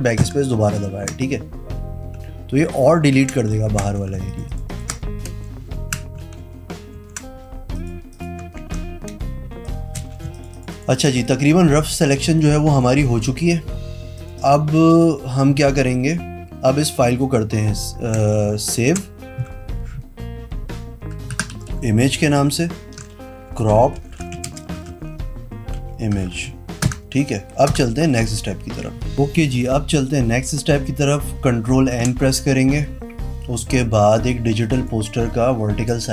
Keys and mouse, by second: 0.3 BackSpace, 3.3 ctrl+d, 3.4 click, 3.6 z, 4.3 space, 4.4 click, 6.5 ctrl+z, 7.1 ctrl+z, 7.9 click, 8.7 ctrl+d, 9.4 space, 10.1 z, 10.5 alt+click, 10.7 alt+click, 10.8 alt+right click, 10.9 alt+click, 11.0 alt+space, 11.1 click, 12.5 click, 13.3 v, 14.3 click, 14.5 click, 15.0 click, 19.0 ctrl+shift+s, 21.4 Down, 21.6 Left, 22.2 Left, 22.7 ctrl+shift+Left, 23.4-27.0 typing, 27.0 Return, 27.8 Return, 31.9 ctrl+m, 33.6 click, 34.5 click.